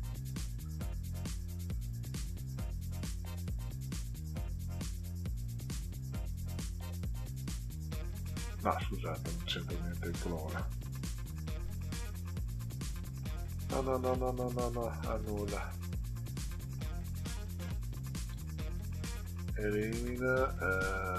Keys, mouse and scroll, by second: 1.3-3.8 drag, 4.4-4.9 drag, 6.6 click, 7.6-8.0 scroll up 2, 9.0 click, 11.7 click, 13.6 click, 14.9 click, 16.7 click, 18.2 click.